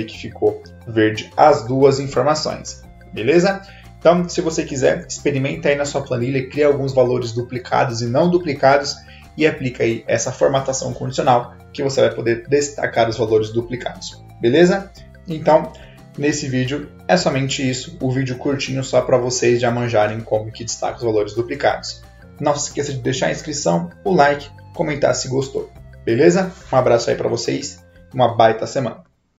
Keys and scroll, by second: 1.9 ctrl+z.